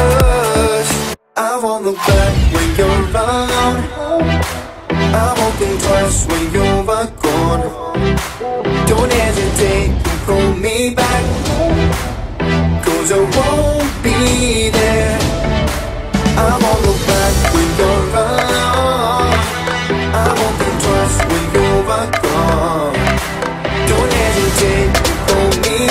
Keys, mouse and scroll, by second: 1.2 scroll down 1, 1.9 click, 2.3-3.1 scroll up 1, 3.4 m, 3.6 click, 4.6 Right, 4.9-5.6 typing, 5.5 Return, 6.4 scroll down 1, 6.9 click, 7.3-7.8 scroll up 1, 7.9 shift+middle click, 8.7 scroll up 1, 9.1 r, 9.8 click, 11.9 space, 12.4 scroll up 1, 12.5 r, 13.3 click, 13.7-14.3 scroll down 1, 16.1 click, 16.5 space, 17.6-18.4 scroll up 1, 18.6 r, 19.2 click, 23.3-23.8 scroll down 1, 24.8 click.